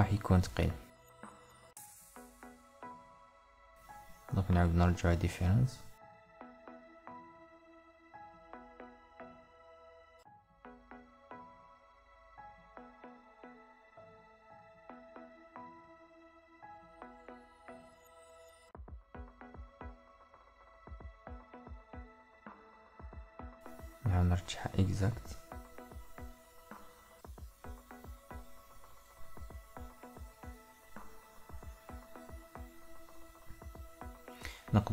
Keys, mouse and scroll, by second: 22.4-31.1 middle drag.